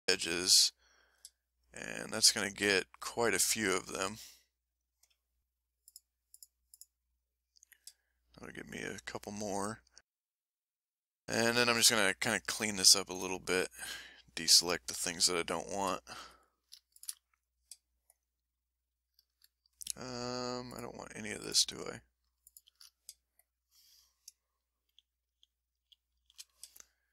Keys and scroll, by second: 15.1-15.8 scroll up 3, 17.3-17.7 scroll down 2, 18.2 ctrl+alt+shift+scroll down 2, 24.9 shift+l, 25.7 l, 26.1 l.